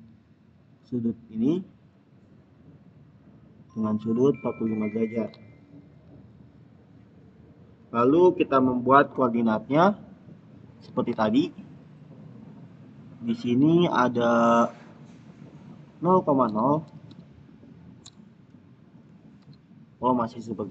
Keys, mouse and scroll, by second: 0.7 click, 11.9 click, 16.2-17.5 typing, 17.9 Return.